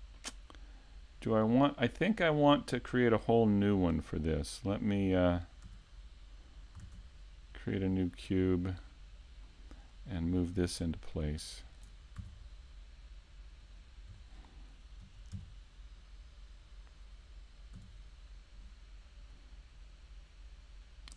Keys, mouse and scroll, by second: 0.2-0.8 scroll down 5, 0.8-1.2 scroll up 5, 1.7 click, 2.9-3.3 scroll down 2, 3.3 z, 3.6 middle click, 5.7 click, 7.7 middle click, 8.9 KP_7, 10.3-11.0 scroll down 2, 11.8 scroll down 1, 18.2 click, 19.3 click.